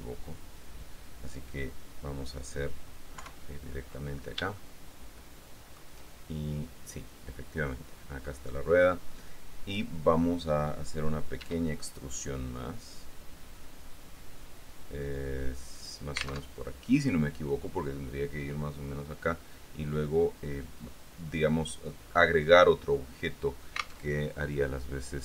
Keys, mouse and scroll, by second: 3.3 KP_3, 4.1-4.7 scroll up 1, 4.7-6.1 shift+drag, 11.6 e, 15.9 click, 16.7 alt+Tab, 24.3 alt+Tab.